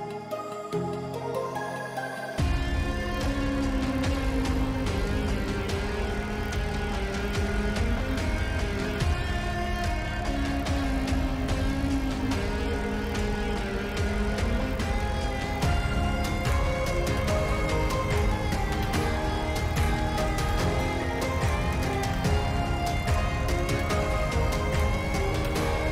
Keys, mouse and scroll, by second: 2.6 shift+middle click, 4.2 click, 5.2 click, 7.1 click, 8.6 click, 10.5 shift+middle drag, 11.3 shift+middle click, 12.8 click, 16.7-17.1 shift+middle drag, 17.3 shift+middle click, 17.9 shift+middle drag, 18.7 shift+middle click, 21.3-22.4 shift+middle drag, 24.0-24.3 shift+middle drag, 25.2 shift+middle drag, 25.8 click.